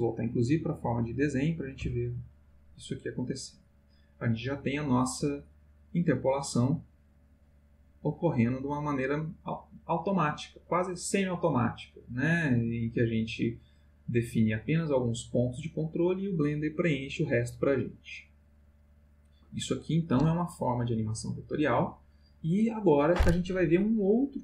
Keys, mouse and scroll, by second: 0.9 click.